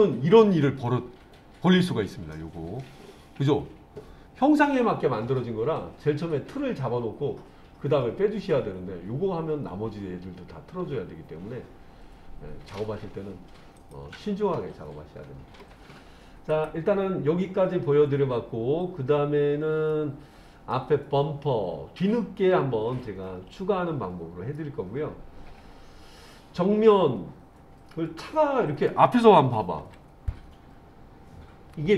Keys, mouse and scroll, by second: 13.8 click, 14.5-15.7 middle drag, 16.5 click, 19.9 middle click, 24.6-28.9 middle drag, 29.8 KP_1.